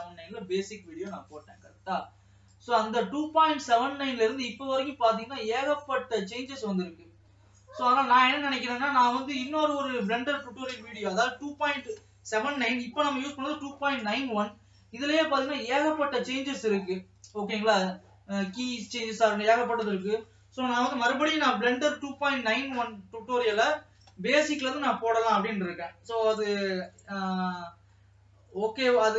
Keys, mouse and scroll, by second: 3.6 middle click, 4.5 scroll up 4, 5.2-5.7 scroll up 1, 5.7-7.1 shift+middle drag, 7.1 scroll down 1, 7.6-9.1 middle drag, 9.1 scroll down 2, 10.0 ctrl+s, 10.7 KP_0, 17.8-19.1 shift+middle drag, 19.1 alt+a, 19.6 ctrl+s.